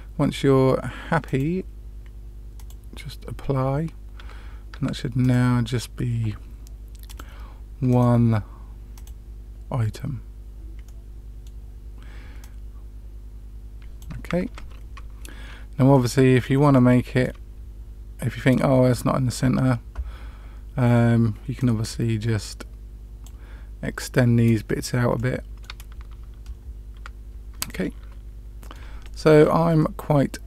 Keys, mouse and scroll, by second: 1.2-2.8 drag, 4.1 Tab, 4.7 Tab, 5.1 click, 7.0 click, 7.8 click, 8.9 click, 10.8-11.4 middle drag, 12.3-14.0 drag, 14.4 ctrl+x, 14.4 ctrl+z, 15.9-16.4 middle drag, 16.7-17.2 shift+middle drag, 18.4-18.9 middle drag, 21.5 click, 25.1-25.7 middle drag, 25.8 Tab, 26.9 Tab, 27.6-28.7 middle drag, 29.0-29.3 shift+middle drag, 29.7-30.4 middle drag.